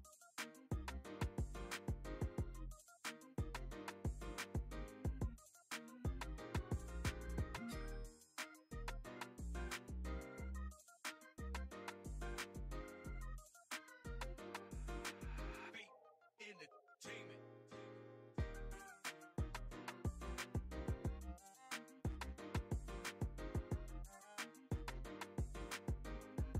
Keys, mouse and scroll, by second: 0.2 f, 0.4 click, 1.1 click, 2.4 click, 2.4 middle click, 2.8 middle click, 3.5 click, 3.9 middle click, 4.0 click, 5.0 middle click, 5.2 click, 5.4 shift+f, 5.7 click, 8.2 click, 8.4-8.8 shift+f, 8.9 click, 9.0 f, 9.1 click, 9.8 middle click, 9.9 click, 10.3 middle click, 10.4 click, 11.1 click, 11.6 middle click, 11.7 middle click, 11.9 middle click, 12.0 click, 12.7 click, 13.0 middle click, 13.1 click, 13.3 middle click, 13.5 ctrl+middle click, 13.7 click, 13.9-14.9 drag, 14.9 middle click, 15.1 click, 15.6 f, 15.6 click, 16.0 click, 16.3 click, 16.6 middle click, 16.7 click, 17.6 middle click, 17.7 click, 18.0 middle click, 18.1 click, 18.4 ctrl+middle click, 18.7 middle click, 18.9 click, 19.6 click, 20.1 click, 20.9 click, 22.0 middle click, 22.4 shift+f, 22.7 middle click, 22.8 click, 24.4 click, 25.5 middle click, 25.6 click, 25.8 middle click, 25.9-26.5 drag.